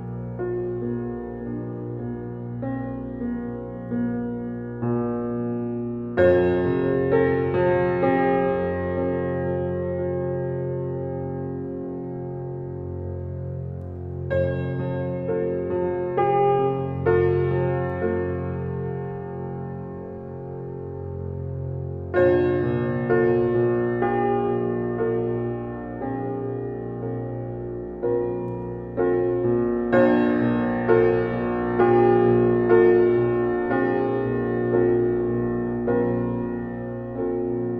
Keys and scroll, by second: 6.9 f.